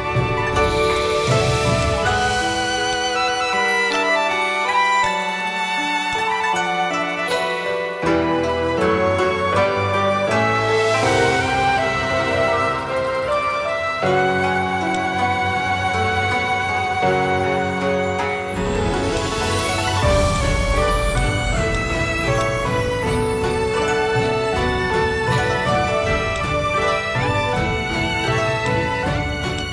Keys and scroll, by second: 6.4 v, 11.9-12.9 typing, 13.1 Tab, 14.3 1, 15.1 3, 18.2 v, 27.8 Left.